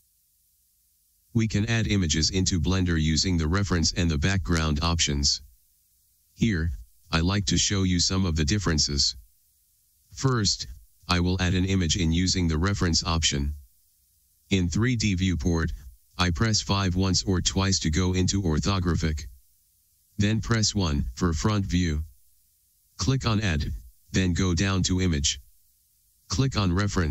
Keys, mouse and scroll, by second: 9.8-27.1 shift+middle drag, 18.0 KP_5.